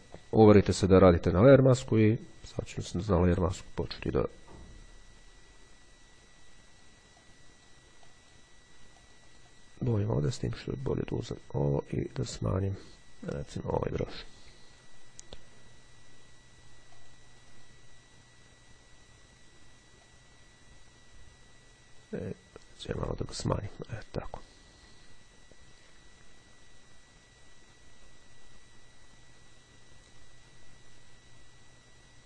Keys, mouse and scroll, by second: 0.2 click, 2.7-7.4 drag, 8.2 click, 9.1-10.2 drag, 11.3 click, 13.4 click, 14.9-15.4 ctrl+scroll up 2, 17.1-18.2 drag, 20.2-23.7 drag.